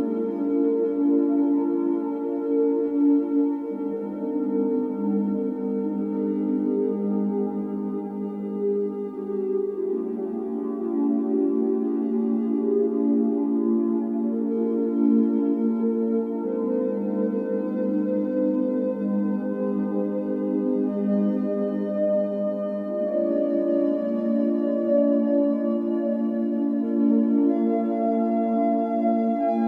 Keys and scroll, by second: 1.4-2.4 typing, 6.3 Escape, 7.9 x, 10.3-11.9 typing, 16.9 Escape, 18.0 typing, 19.3 typing, 20.3-21.4 typing, 26.2 Escape, 27.3-28.6 typing.